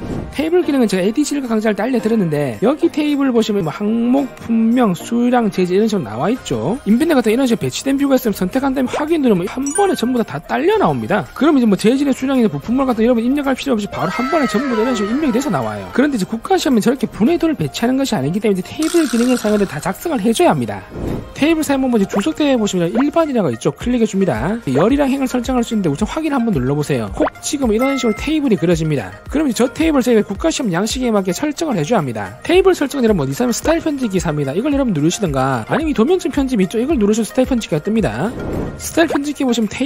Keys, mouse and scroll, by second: 2.5 scroll up 3, 3.3-3.7 scroll up 2, 8.8 click, 9.5 click, 10.7 click, 11.0 middle click, 11.3 scroll up 2, 12.4-13.9 drag, 27.0 click, 27.8 click, 37.5 click.